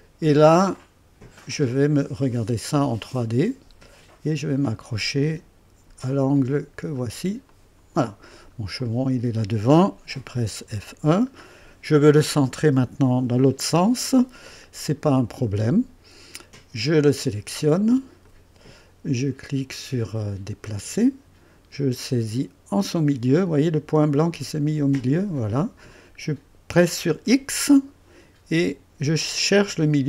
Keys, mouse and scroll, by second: 1.5-2.2 drag, 2.4 scroll down 2, 2.9 right click, 7.4 click, 8.2 scroll down 1, 8.8 click, 10.6-11.3 typing, 11.4 scroll up 1, 12.1-13.9 right drag, 18.2 click, 20.7 click, 25.3 click, 27.1 x.